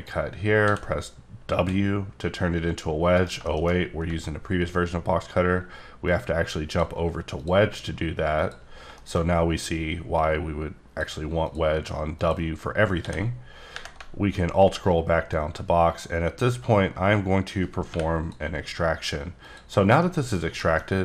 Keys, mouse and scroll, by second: 0.6 w, 1.5 w, 3.2 right click, 3.4 shift+middle click, 3.7-4.0 scroll up 4, 4.4-5.5 alt+scroll up 3, 5.5-6.1 alt+scroll up 1, 6.1 click, 7.4 click, 8.7 scroll down 3, 8.9 shift+middle click, 9.2 scroll up 1, 10.1 click, 11.4 click, 12.1 click, 12.5-12.9 scroll down 1, 12.9 scroll up 1, 13.0 d, 14.3 alt+scroll down 2, 15.3 click, 17.9 y, 19.4 click, 19.8 scroll down 1, 20.0 middle click, 20.8 scroll up 2.